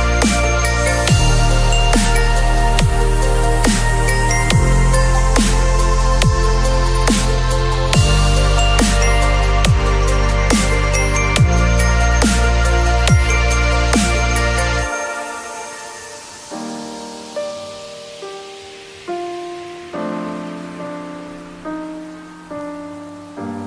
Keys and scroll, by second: 0.7 b, 1.7 ], 4.0 0, 8.4 v, 15.7 ctrl+w, 15.9 v, 16.7 ctrl+v, 21.8 ctrl+t.